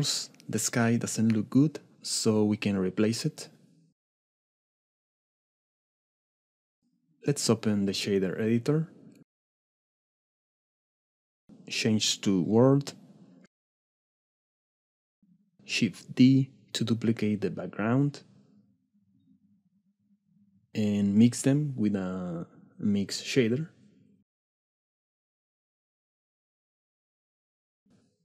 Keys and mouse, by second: 3.9 shift+middle click, 6.7 click, 7.8-10.8 drag, 11.5 click, 12.4-13.5 drag, 14.3 click, 14.8 click, 16.1 shift+click, 18.4 click, 20.8 drag, 27.1-28.2 drag.